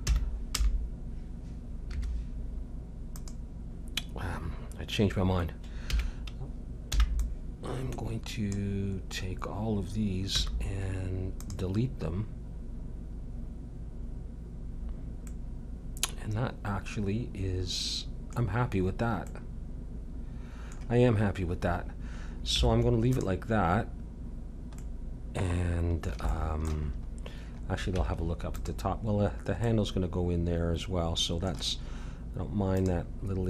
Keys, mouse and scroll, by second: 4.6-5.8 drag, 5.8 a, 6.9 b, 10.4 x, 15.3-17.5 middle drag, 18.5-21.1 middle drag, 22.5 Tab, 23.7-28.7 middle drag, 27.9 Tab, 32.7-33.4 drag.